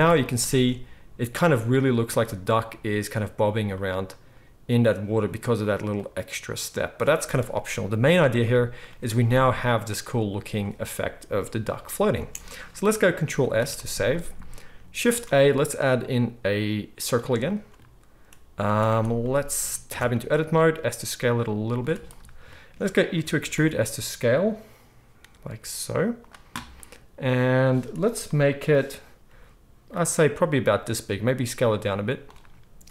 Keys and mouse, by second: 0.0 ctrl+s, 0.5 space, 12.1 space, 13.4 ctrl+s, 13.6 ctrl+s, 15.0 shift+a, 18.6 z, 19.9 Tab, 20.7 s, 21.8 z, 23.1 e, 27.2-32.9 middle drag, 30.7 s.